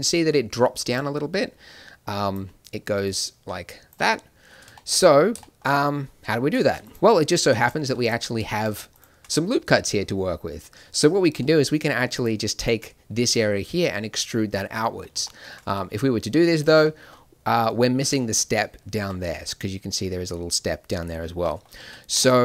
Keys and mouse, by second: 0.8 click, 0.8 d, 2.3 d, 2.9 click, 2.9 d, 3.9 d, 4.3 middle click, 15.6 e, 21.7 ctrl+z.